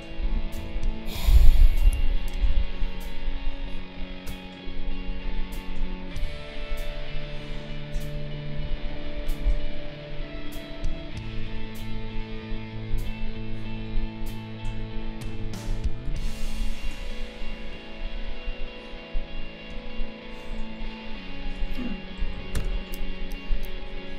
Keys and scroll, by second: 0.5 ctrl+a, 1.9 ctrl+g, 8.8 ctrl+0, 22.2 3, 22.5 Return.